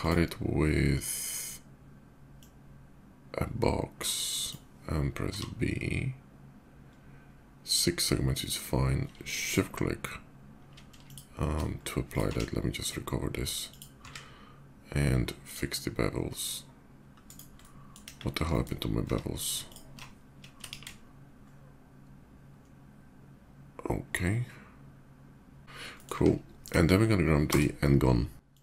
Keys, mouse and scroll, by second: 2.0-4.2 drag, 5.1 b, 6.7-7.7 middle drag, 8.2 click, 9.2 shift+click, 10.8 shift+click, 11.5 shift+middle drag, 11.8 shift+click, 12.0 q, 13.0 click, 13.5 click, 15.0 click, 17.0 right click, 17.4-17.7 middle drag, 17.9 KP_5, 18.1 middle click, 18.3 middle click, 18.8 Tab, 19.4 ctrl+alt+Tab, 19.4 click, 20.3 ctrl+b, 21.2 ctrl+shift+b, 21.2 middle click, 25.6 Tab, 25.6 middle click, 26.4 KP_5, 27.2 d, 28.2 click.